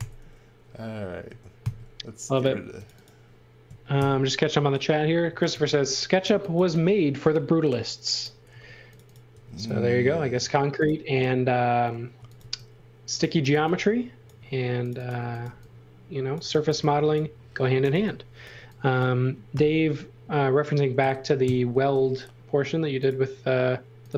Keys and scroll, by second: 1.6 super+x, 3.9 alt+shift+v, 5.0-6.5 typing, 8.5 space, 9.3 b, 11.9-19.5 typing, 20.6-21.5 typing.